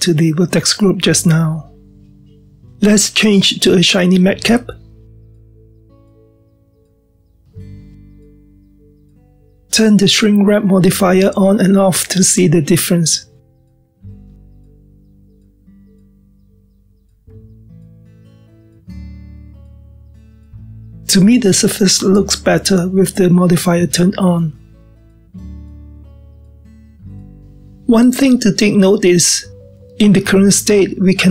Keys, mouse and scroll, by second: 5.3-8.5 drag, 8.9-9.5 scroll down 1, 9.5-12.0 middle drag, 12.0-13.9 scroll up 1, 13.9 click, 14.6-17.5 middle drag, 17.5 click, 18.9 click, 20.0 click, 20.6-23.8 middle drag, 23.8 click, 24.9 click, 25.7-26.0 scroll down 1, 26.0-27.4 middle drag, 29.3-31.0 scroll down 1, 31.0-31.3 scroll down 1.